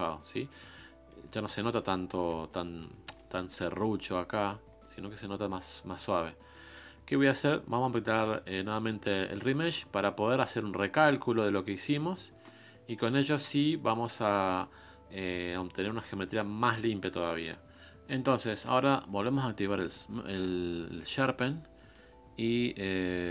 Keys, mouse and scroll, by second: 0.2-0.6 scroll up 3, 0.6-5.7 middle drag, 5.7-8.2 scroll down 1, 8.2-9.7 scroll down 1, 9.7-10.1 scroll down 1, 17.6 middle click, 18.2 scroll up 1, 18.3-20.7 shift+middle drag, 20.7-23.3 drag.